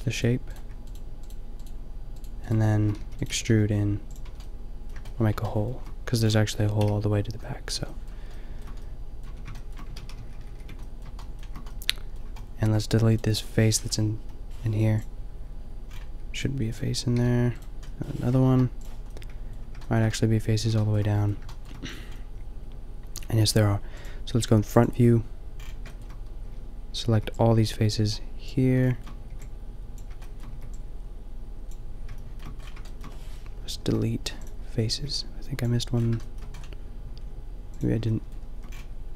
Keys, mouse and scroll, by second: 3.0 e, 3.3 g, 4.3 Tab, 6.8 KP_5, 9.2 Tab, 10.1 ctrl+z, 10.4 ctrl+z, 13.5 middle click, 14.2 Delete, 15.9-17.1 middle drag, 17.1 g, 18.4 Delete, 19.4 middle click, 24.9 middle click, 25.7-27.1 drag, 27.1 b, 29.3 b, 30.5 b, 33.8 Delete, 34.9 b, 35.9 middle click, 37.7 click.